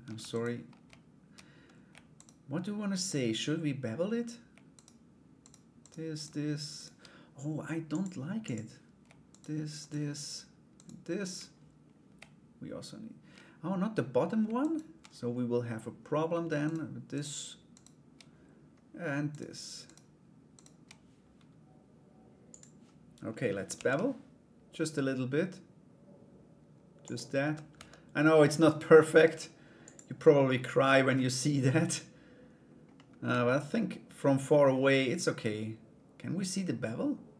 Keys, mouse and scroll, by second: 1.7 shift+right click, 4.3 shift+right click, 5.0 shift+right click, 5.4 shift+right click, 5.7 shift+right click, 6.3 shift+right click, 7.5 click, 8.0 click, 8.9 shift+right click, 9.4 shift+right click, 10.3 shift+right click, 14.2 shift+right click, 16.2 shift+right click, 16.7 shift+right click, 17.3 shift+right click, 18.9 shift+right click, 19.4 shift+right click, 20.1 shift+right click, 22.1 click, 23.3 ctrl+b, 27.0 Tab, 27.3 /, 29.4 click, 30.7 middle click, 32.5 middle click, 37.2 right click.